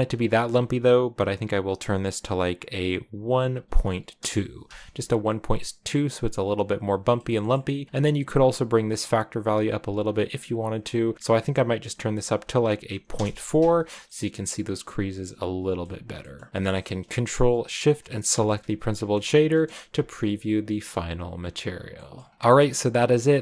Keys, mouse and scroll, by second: 0.0-4.0 drag, 5.0-7.9 middle drag, 7.9-8.5 scroll up 3, 8.5-10.2 drag, 10.2-10.8 scroll up 1, 11.1 click, 11.4-13.7 drag, 13.7 a, 13.9-18.2 middle drag, 18.2 ctrl+shift+click, 19.6 KP_0, 21.2 scroll up 1, 21.9 middle click, 23.2 right click.